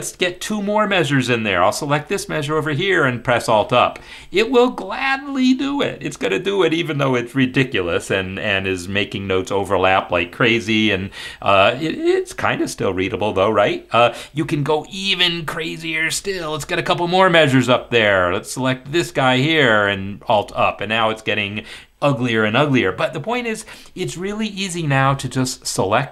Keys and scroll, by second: 3.8 alt+Up, 17.2 alt+Up, 19.8 alt+Up.